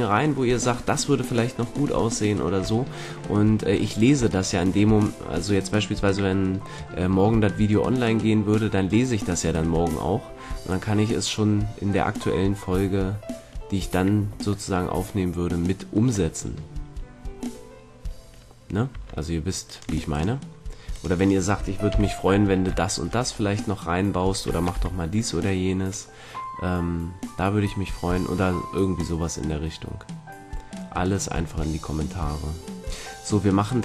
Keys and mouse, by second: 1.9-12.3 middle drag, 13.0-14.6 middle drag, 18.8 Tab, 21.8 KP_3, 22.8-25.2 middle drag, 24.7 z.